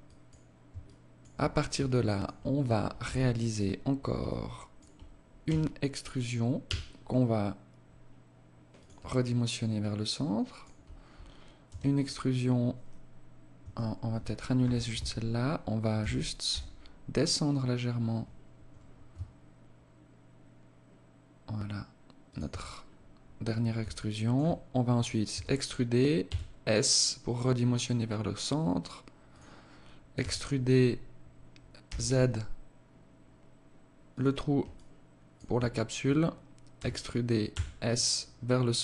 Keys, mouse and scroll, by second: 0.3 alt+shift+click, 1.3 alt+shift+click, 2.4 z, 3.7 alt+click, 4.9 e, 8.5 alt+click, 11.1 e, 14.1 ctrl+z, 15.4 g, 22.2-23.3 scroll up 4, 23.3 alt+shift+click, 24.7 e, 29.5 e, 34.1 alt+click, 36.2 e.